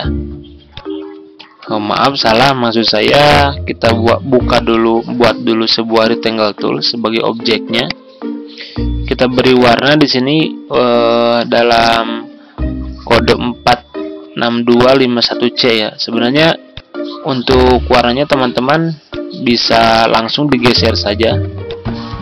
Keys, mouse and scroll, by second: 1.3 Delete, 4.6 click, 9.3 ctrl+v, 10.6 click.